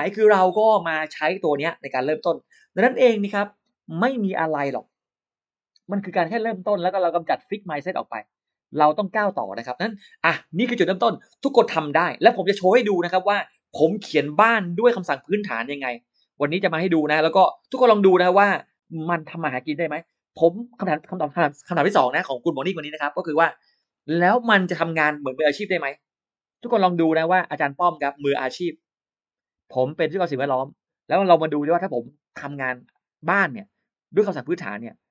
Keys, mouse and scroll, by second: 5.3 middle click, 5.7 middle click, 6.0 middle click, 6.7-8.3 middle drag.